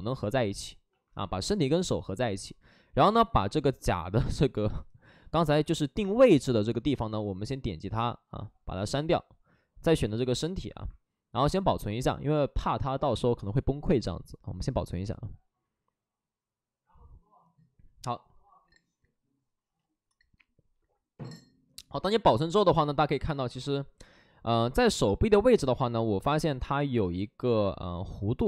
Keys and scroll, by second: 26.4 alt+s, 27.4 ctrl+z.